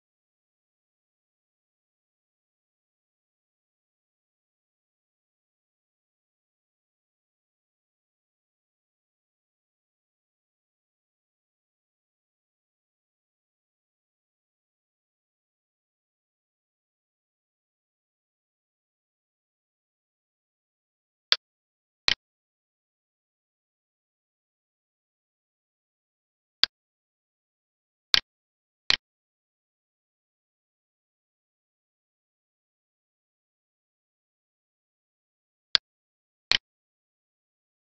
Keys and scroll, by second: 2.1 alt+e, 8.6 Right, 10.6 ctrl+s, 12.4 ctrl+c, 12.7 Down, 14.4 End, 15.3 ctrl+v, 16.4 ctrl+s.